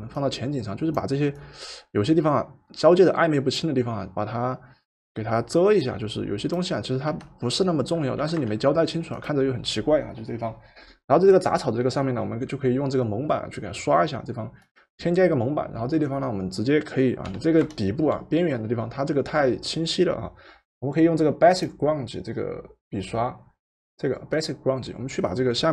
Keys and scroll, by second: 7.0 Return, 8.2 v, 17.3 b, 18.1 b.